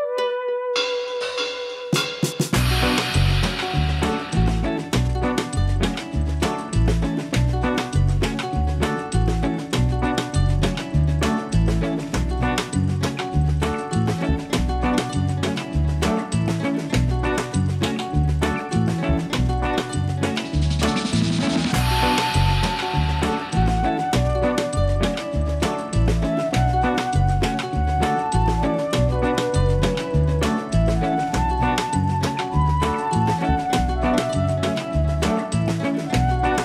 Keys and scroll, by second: 0.3 ctrl+a, 9.5 F4, 36.0 F4.